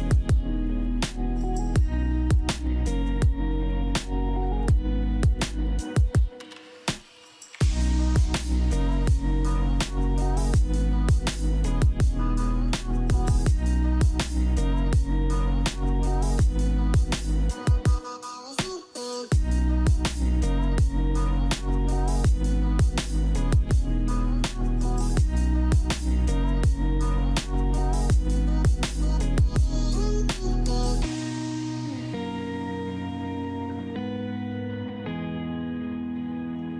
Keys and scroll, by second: 13.4 ctrl+z.